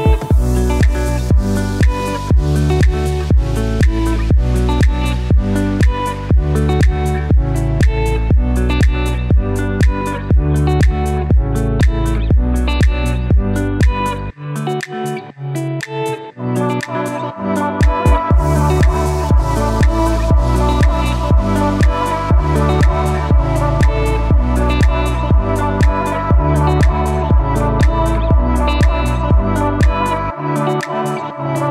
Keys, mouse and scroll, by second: 1.9 Down, 2.0 shift+Up, 5.4 click, 9.8 click, 24.0 click, 31.1-31.7 drag.